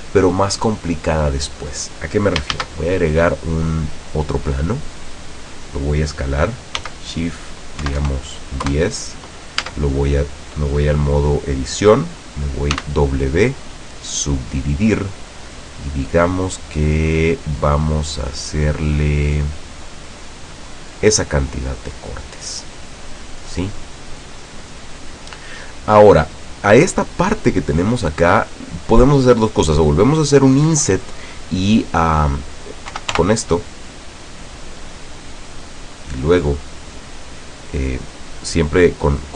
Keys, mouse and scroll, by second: 2.7 shift+a, 4.6 click, 6.9 s, 7.9 KP_1, 8.1 KP_0, 8.8 KP_Enter, 9.7 Tab, 12.9 w, 14.3 click, 17.6-18.3 scroll up 2, 19.0 click, 19.4 click, 20.3 click, 22.5-25.4 middle drag, 33.0 i, 34.6 click.